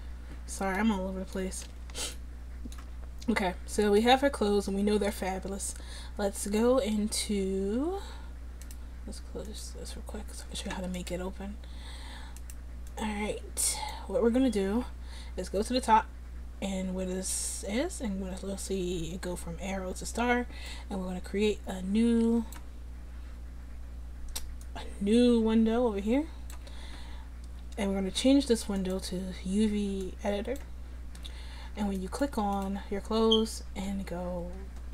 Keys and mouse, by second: 8.7-9.7 middle drag, 10.0 middle click, 13.0-20.7 middle drag, 20.7-26.0 drag, 28.8-34.9 drag, 33.3 Tab, 34.0 a.